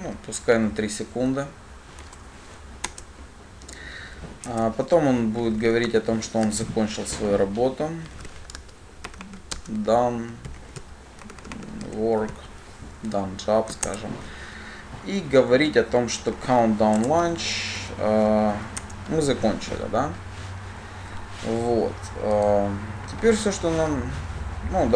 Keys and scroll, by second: 2.8 alt+Return, 6.1 Tab, 14.1 shift+Return, 17.3 Return.